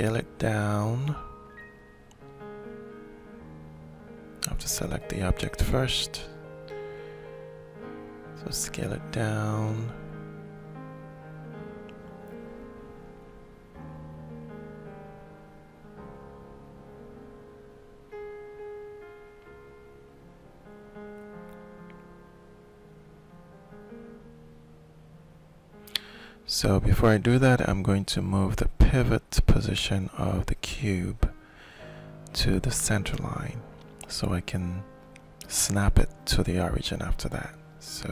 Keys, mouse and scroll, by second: 1.1 click, 3.8 middle click, 4.5-5.6 ctrl+shift+drag, 5.7 ctrl+shift+click, 5.9 ctrl+shift+click, 7.8 ctrl+click, 8.8-10.4 ctrl+shift+middle drag, 10.4 ctrl+click, 11.6 ctrl+click, 12.5 ctrl+click, 13.3 click, 14.3 click, 15.3-16.3 drag, 16.7-18.1 drag, 18.6-19.7 alt+shift+drag, 21.6 ctrl+shift+click, 22.6 ctrl+shift+right click, 23.0-26.8 ctrl+shift+middle drag, 26.8 right click, 26.8 middle click, 28.2 shift+click, 29.3 ctrl+shift+right click, 30.0 click, 31.1 ctrl+shift+click, 31.8-35.8 ctrl+shift+middle drag, 36.1-37.5 ctrl+alt+drag.